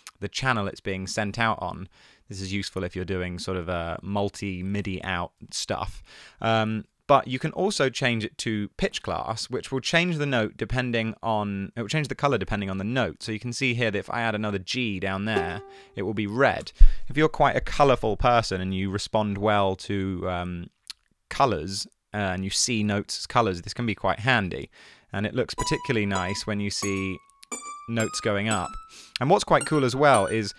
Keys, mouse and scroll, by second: 6.4 super+a, 6.9 super+a, 16.7 BackSpace, 25.2 b.